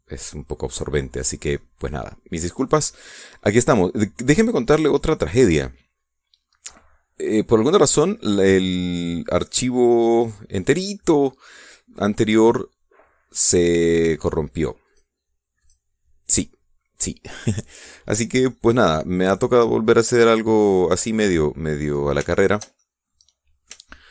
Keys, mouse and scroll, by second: 5.0-12.2 middle drag, 12.5 scroll up 1, 13.0 scroll down 1, 15.5 click, 16.3 click, 19.1-22.4 middle drag, 22.4 scroll up 2, 22.9-24.1 shift+middle drag.